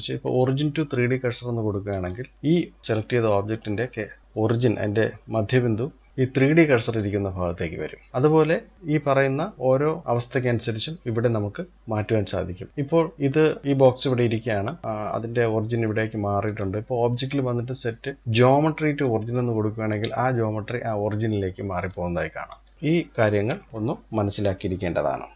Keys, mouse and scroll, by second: 6.6 click, 8.1 click, 9.2-11.7 drag, 12.9 click, 16.1-18.8 drag, 21.4-22.4 drag, 22.7-23.7 scroll up 3, 23.7-25.3 middle drag.